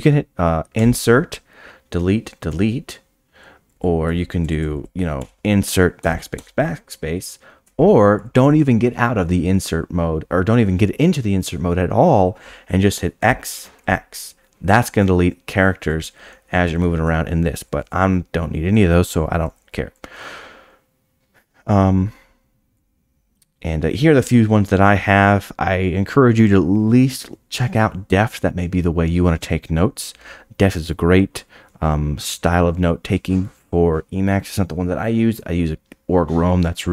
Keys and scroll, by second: 0.8 Escape, 0.8 i, 5.2 i, 13.2 x, 13.8 x, 17.6 u, 17.7 u, 17.8 u, 18.0 u.